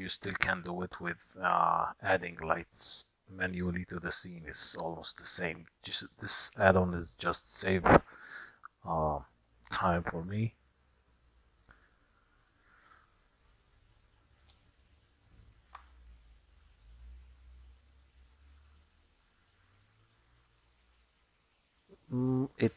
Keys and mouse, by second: 0.6-1.8 drag, 10.8-11.8 drag, 13.8 middle click, 14.8-15.6 shift+middle drag, 15.6 shift+click.